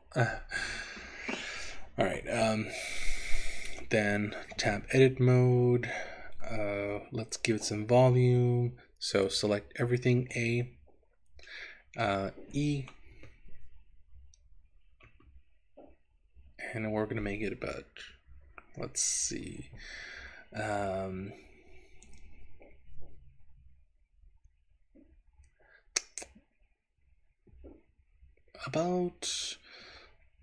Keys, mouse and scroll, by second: 3.7 click, 4.8 Tab, 5.2-5.9 scroll down 1, 5.9-6.8 scroll down 2, 10.2 a, 11.4 middle click, 12.9 click, 15.1 e.